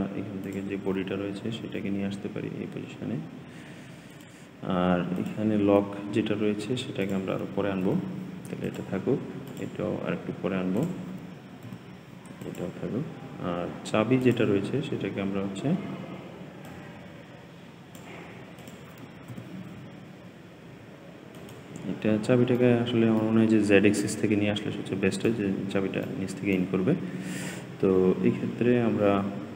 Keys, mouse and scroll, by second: 0.3 click, 1.3 g, 5.0 click, 6.9 click, 7.7 g, 9.3 click, 10.6 click, 11.5 g, 14.1 click, 16.5-18.6 drag, 19.2 g, 22.0 scroll up 2, 22.5 middle click, 23.3-23.9 scroll down 4, 23.9-29.1 middle drag.